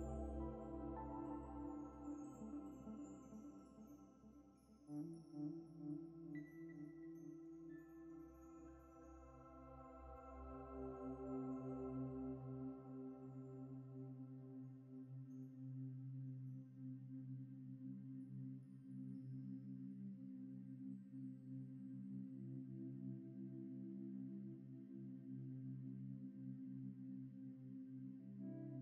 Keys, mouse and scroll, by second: 4.9 double click, 5.7 middle click, 10.8 alt+Tab, 12.5 alt+Tab, 13.9 alt+Tab, 15.6 alt+Tab, 24.7 ctrl+space, 24.7 ctrl+click, 25.0 ctrl+space, 28.3 typing.